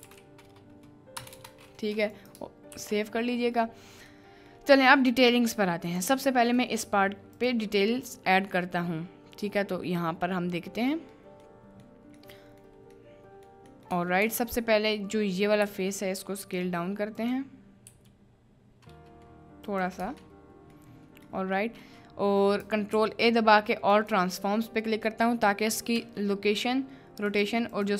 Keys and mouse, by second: 2.7 ctrl+s, 4.2-4.6 middle drag, 5.1 middle click, 5.8 click, 6.5 middle click, 7.3 click, 9.5 middle click, 10.5 middle click, 11.5 middle click, 12.3 middle click, 13.0 middle click, 13.7 middle click, 14.1 Tab, 14.5 alt+click, 15.1 middle click, 15.7 s, 16.4 click, 17.2 click, 17.9 s, 20.0 Tab, 20.3-20.8 middle drag, 21.4 middle click, 22.9 ctrl+a, 25.9 n.